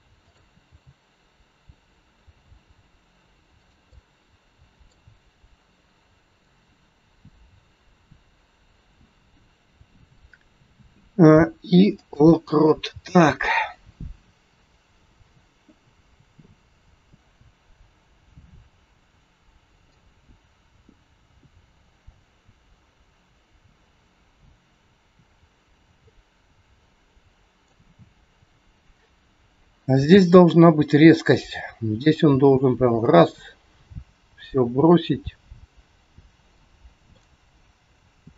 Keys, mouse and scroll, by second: 0.2 click, 0.6 g, 3.8 middle click, 10.5 a, 11.2 i, 13.6 click, 19.9 click, 28.2 click, 30.1 g, 32.1 click, 37.1 middle click.